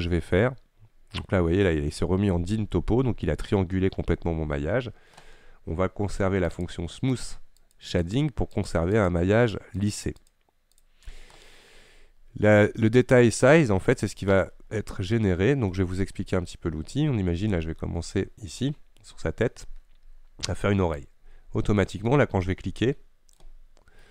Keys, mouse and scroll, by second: 0.3-0.8 scroll down 4, 0.8-1.2 scroll up 5, 1.2-1.6 scroll down 3, 1.6-2.1 scroll up 2, 2.1-3.2 scroll down 2, 3.4-6.6 scroll up 2, 6.6-10.4 drag, 10.8 click, 16.1-16.5 scroll down 2, 16.5-18.7 middle drag, 18.7 scroll up 2, 18.9-21.0 scroll down 2, 21.0-24.1 drag.